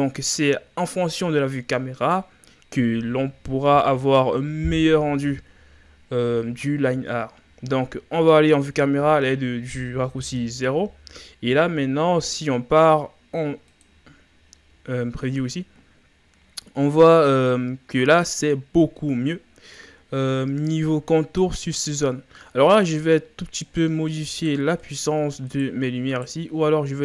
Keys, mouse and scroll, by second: 8.2 KP_0, 14.0 click, 16.7-17.3 scroll down 2, 17.3-18.4 scroll down 6, 18.4-18.9 scroll up 7, 19.4-19.8 scroll down 4, 19.9 scroll up 1, 21.5-22.4 scroll down 7, 22.4-23.0 middle drag, 23.1-23.8 scroll down 5, 23.8-24.3 middle drag, 24.3 right click, 24.8 right click, 25.6-27.0 shift+right drag.